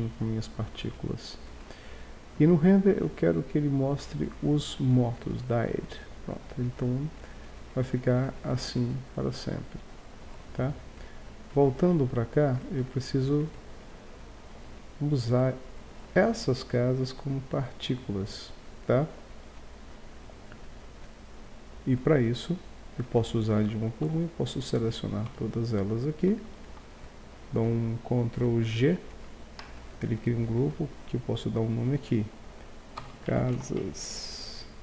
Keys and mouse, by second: 3.9-7.5 drag, 10.0-11.3 middle drag, 11.5-12.6 drag, 12.6 right click, 13.4-20.9 middle drag, 24.1 a, 25.3 a, 26.5 z, 26.8 z, 28.8 ctrl+g, 30.8-32.4 drag.